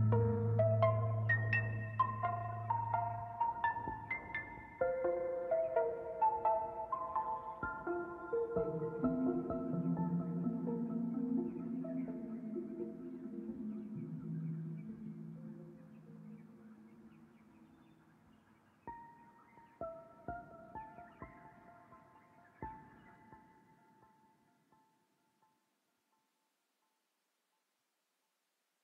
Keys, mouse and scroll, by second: 2.0 click, 8.2-11.2 drag, 12.6-14.6 drag, 16.0 scroll up 2, 16.5-18.1 shift+middle drag, 18.1-18.6 scroll up 5, 18.6-20.8 shift+middle drag, 20.8-24.7 drag, 25.0 scroll down 1, 25.3-27.2 middle drag, 27.7-28.8 drag.